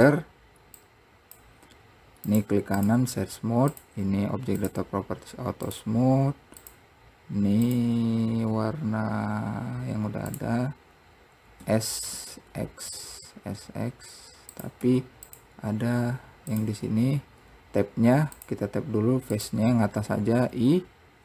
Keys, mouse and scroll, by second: 0.9 click, 2.5-3.9 right drag, 3.9 click, 4.8 click, 5.9 click, 6.8-7.9 drag, 10.6 click, 16.2 scroll down 1, 16.7 click, 18.5 click, 19.5 click, 20.6 i.